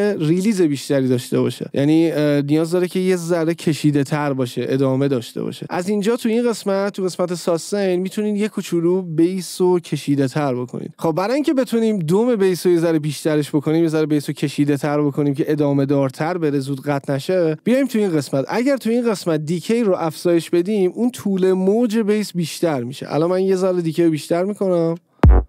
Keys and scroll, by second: 25.2 space.